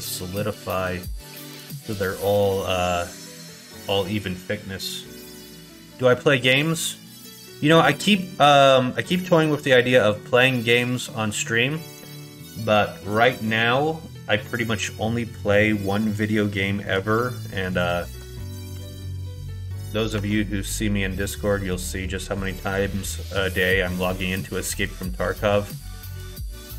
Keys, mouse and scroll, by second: 16.3 shift+middle click, 17.6 ctrl+click, 18.8 ctrl+z, 19.3 right click, 20.1 Tab, 21.4 click, 22.1 click, 23.7 Tab.